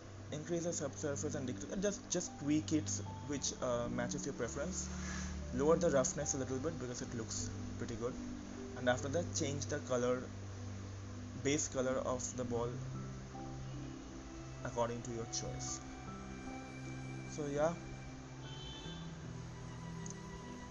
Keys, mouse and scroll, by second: 13.9-18.6 drag, 20.4 click.